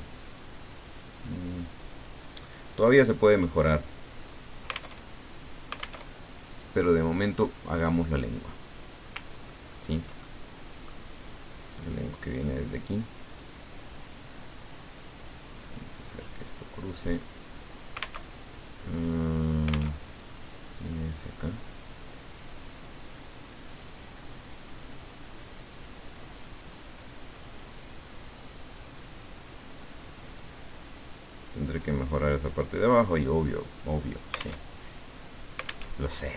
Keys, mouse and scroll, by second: 5.0 alt+Tab, 6.0 alt+Tab, 8.7 click, 9.5 ctrl+scroll up 2, 10.2-11.3 ctrl+middle drag, 13.3 click, 14.4 click, 17.0 click, 18.3 alt+Tab, 19.9 alt+Tab, 21.6 click, 23.0 click, 24.8 click, 25.8 click, 26.9 click, 30.4 click, 31.5 click, 32.5 click, 34.7 alt+Tab, 35.9 alt+Tab.